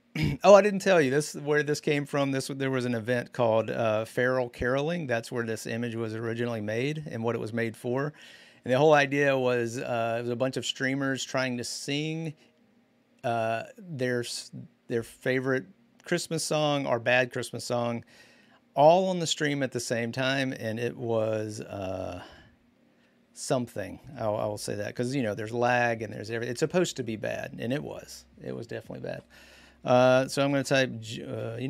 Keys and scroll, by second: 29.6-31.6 typing.